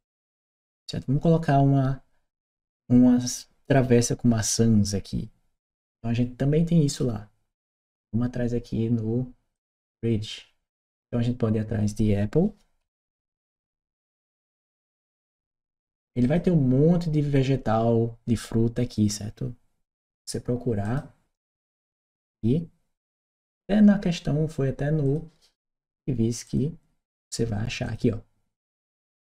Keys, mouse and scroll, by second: 6.7 click, 9.4 click, 10.8 click, 16.1 click, 20.7 click, 21.5 click, 24.9 click, 27.7 click, 28.7-29.2 scroll down 1.